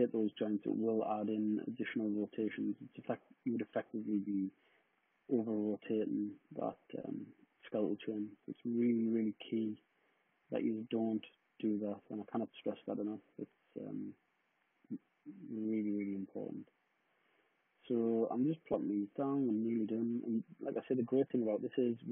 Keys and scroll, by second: 12.8 super+d.